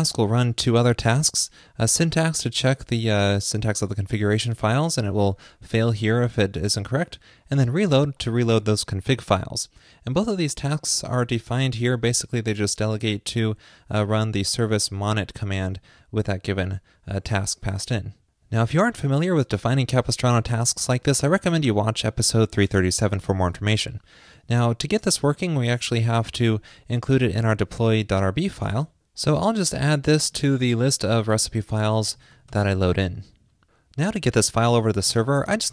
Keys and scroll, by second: 25.7 super+s, 30.8 ctrl+shift+d, 33.2 super+s.